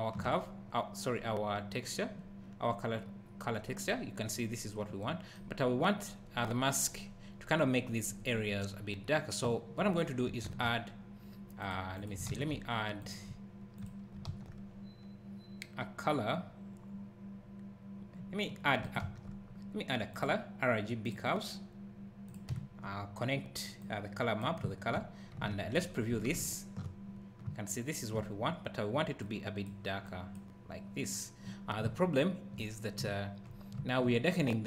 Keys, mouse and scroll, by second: 0.6 scroll up 1, 1.2-2.8 scroll down 1, 9.5 `, 10.4 shift+a, 11.7 click, 12.3 shift+a, 13.0 click, 13.8 shift+click, 14.3 shift+a, 18.8 shift+click, 19.0 shift+a, 22.3 click, 22.5 `, 23.8 click, 24.6 `, 26.5 ctrl+shift+click, 27.4 `, 29.2 click, 31.8 `.